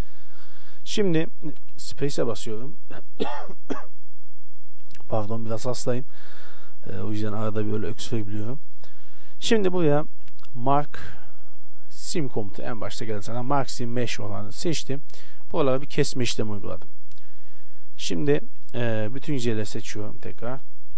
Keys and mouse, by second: 0.3 z, 1.7 space, 16.0-17.4 middle drag, 17.4 shift+space, 19.1 a, 19.4 a, 19.8 t.